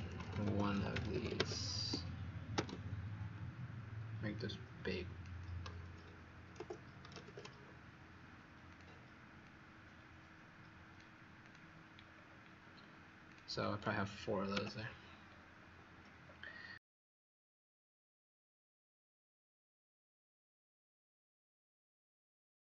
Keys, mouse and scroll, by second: 0.0-1.5 typing, 4.3 click, 5.9-7.2 typing, 8.6 click, 11.9 scroll down 1, 13.6 click, 14.5 Delete, 15.2-16.1 scroll up 3, 16.2 scroll down 1, 17.4-17.8 scroll up 3.